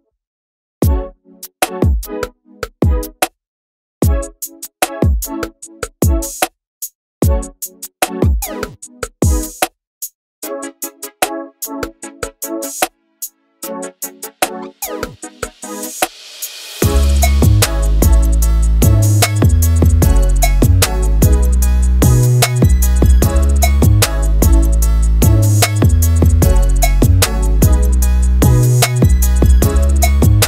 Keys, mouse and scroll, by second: 3.6 click, 4.5 click, 6.9 click, 8.0 click, 9.2 Tab, 9.7 alt+a, 10.0 click, 10.1-11.0 right drag, 11.0-12.3 middle drag, 12.3 scroll up 1, 12.5-13.0 middle drag, 13.0 Tab, 14.0 a, 14.1-17.4 right drag, 17.4 Tab, 17.9 alt+a, 18.1 scroll down 1, 18.3 middle click, 18.6-19.0 scroll up 2, 19.0 click, 19.2 Tab, 19.7 click, 20.4 click, 22.0 click, 23.1 ctrl+KP_Add, 24.4 click, 25.7 Tab, 26.0 Tab, 26.7 a, 27.6 right click, 27.9 Tab, 28.4 alt+a, 29.4 scroll down 5, 29.6-30.0 scroll up 2, 30.0 click.